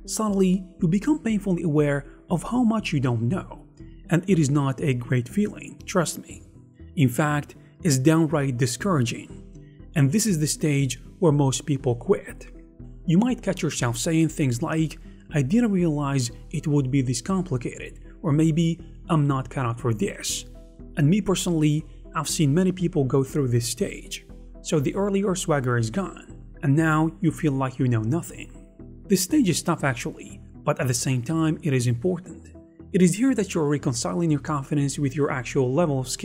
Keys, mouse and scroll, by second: 0.6 shift+m, 0.8 ctrl+r, 0.9 scroll up 1, 1.2 right click, 1.2 a, 1.7 shift+click, 1.8 shift+f, 2.2 shift+click, 2.6 shift+click, 2.8 shift+f, 3.9 scroll up 1, 8.7-10.5 typing, 12.6 d, 12.8 right click.